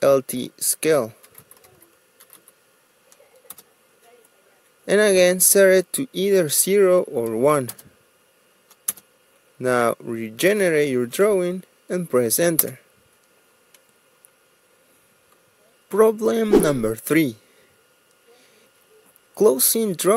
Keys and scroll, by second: 2.4-3.5 typing, 4.6 Return, 8.9 0, 10.1 Return, 11.4-12.3 typing, 13.9 Return.